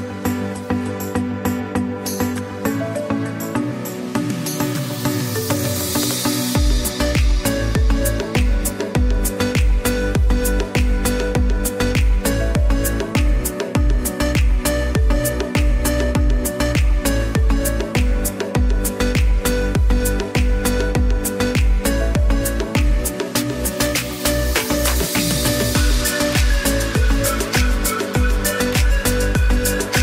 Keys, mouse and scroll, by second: 0.8 click, 4.1 click, 4.3 z, 5.0 click, 8.3 space, 8.5 click, 8.8 space, 9.1 click, 10.3 ctrl+click, 11.3 ctrl+g, 12.5 ctrl+alt+shift+e, 17.8 click, 20.0 click.